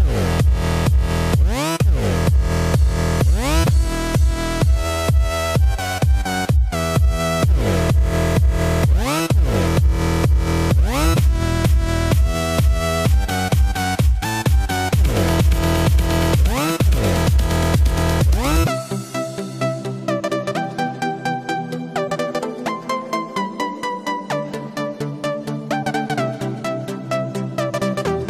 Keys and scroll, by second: 8.5 Return, 9.4 super+=, 9.7 super+=, 10.2 super+=, 16.5 Return, 26.4 Return.